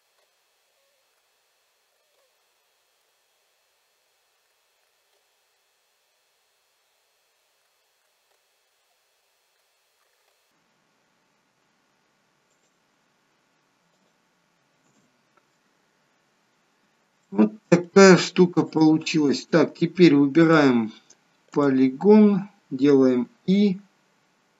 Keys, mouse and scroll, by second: 0.6 k, 2.3 middle click, 2.8 shift+middle click, 3.1 middle click, 4.0 k, 7.3 k, 9.2 k, 11.3 k, 15.4 scroll down 2, 16.4-16.8 scroll up 2, 16.9 scroll down 1, 17.2 middle click, 18.6 click, 20.4 click, 21.6 click, 23.2 i.